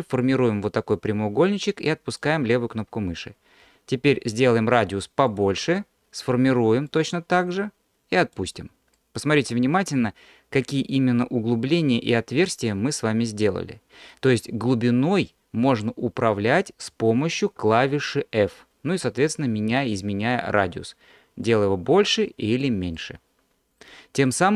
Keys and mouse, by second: 3.7 f, 6.9-8.4 drag, 9.0-16.2 middle drag, 17.6 f, 21.5 f, 22.1 click, 23.0-24.3 middle drag.